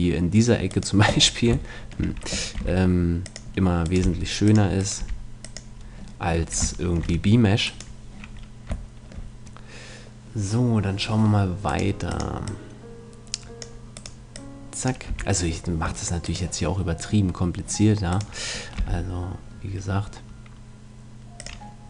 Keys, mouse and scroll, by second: 0.7 right click, 1.2-2.3 middle drag, 2.7 g, 3.5 click, 4.0 g, 5.0 g, 6.6 click, 7.7-9.5 right drag, 9.5-11.7 middle drag, 11.7-13.6 right drag, 12.1-14.3 drag, 13.9 right click, 15.1 a, 15.8 click, 16.3-19.9 right drag, 18.8 g, 21.5-21.8 drag.